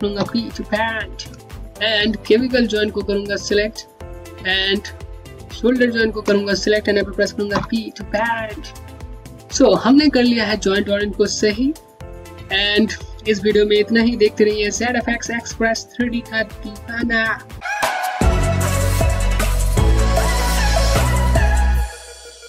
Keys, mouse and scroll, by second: 1.5 alt+click, 2.7 click, 5.3 shift+click, 7.2 p, 9.2-9.6 scroll down 1, 9.6 alt+click.